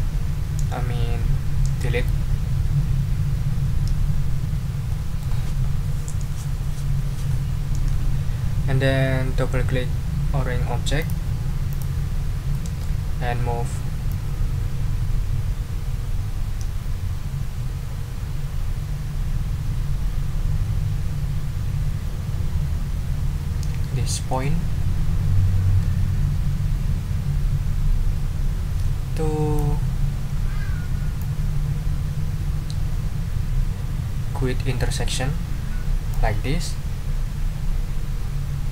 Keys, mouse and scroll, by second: 11.2 click, 11.7 click, 12.5 middle click, 14.1-29.7 drag, 30.2 ctrl+scroll up 2, 31.2-36.3 drag.